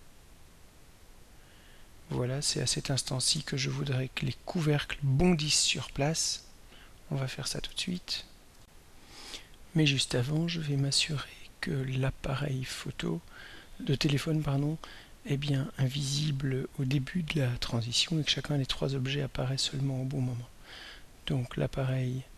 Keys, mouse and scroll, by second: 7.9 ctrl+s, 8.6 r, 12.1 click, 21.5-22.3 drag.